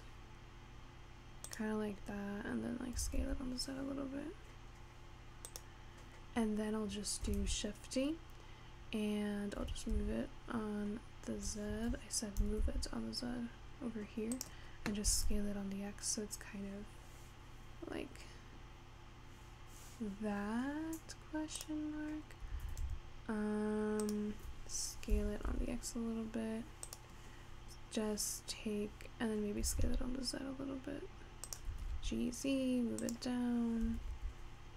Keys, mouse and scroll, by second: 3.0 s, 7.4 shift+d, 12.4 g, 15.2 s, 22.5 s, 25.2 s, 29.7 s, 31.7 g, 33.9 g.